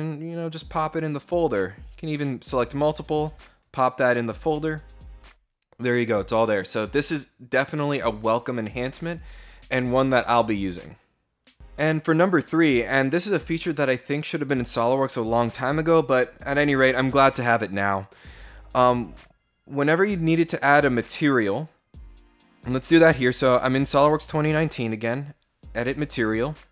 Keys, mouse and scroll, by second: 0.9 click, 2.4 click, 4.5 click, 22.9 right click, 24.0 click.